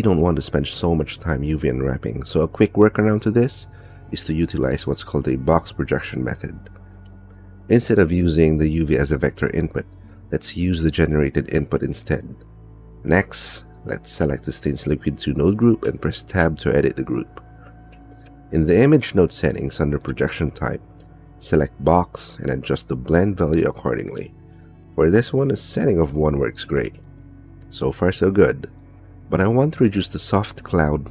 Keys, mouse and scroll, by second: 0.0 click, 0.0 middle click, 0.2 click, 0.7 click, 1.9 click, 3.5 click, 4.5 click, 6.3 click, 7.7 click, 9.4 click, 11.5-12.5 drag, 12.9 click, 14.1 click, 15.2 click, 15.6 click, 16.7 Tab, 17.7 click, 20.7 click, 21.9-23.0 drag, 24.1-27.1 drag, 28.3 Tab, 29.5-30.9 drag.